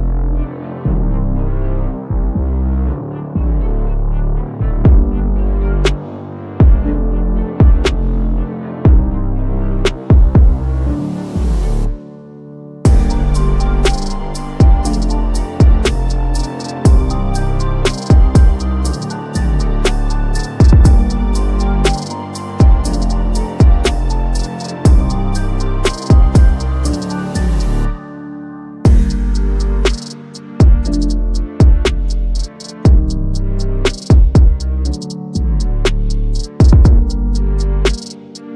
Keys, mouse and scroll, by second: 0.8-1.1 drag, 3.9 click, 5.8-7.8 drag, 10.3-11.2 drag, 14.0 click, 15.6-16.2 drag, 19.3 click, 22.6 click, 22.7 click, 24.9-27.3 typing, 28.2 Return, 29.1-30.8 typing, 32.0-33.5 drag, 35.4-35.9 drag, 37.8 typing.